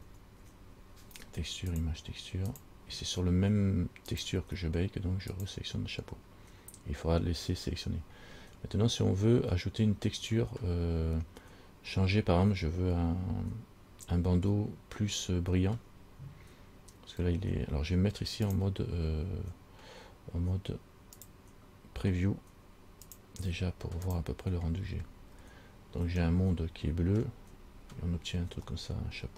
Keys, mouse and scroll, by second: 0.4 shift+a, 4.3 click, 8.6-9.2 scroll down 1, 9.2-9.5 scroll down 3, 18.7 click, 21.4 click, 23.3 click, 24.4 click, 25.3 scroll down 4, 26.5 middle click, 29.0 middle click.